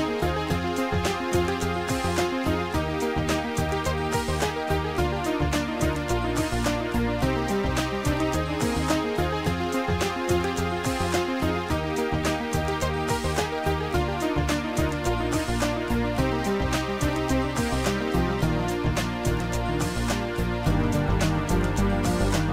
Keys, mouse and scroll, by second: 2.2 Delete, 2.2 click, 8.5 click, 11.0 click, 14.6 click, 15.2 click, 16.5 click, 19.3 click, 21.2 click, 22.3 click.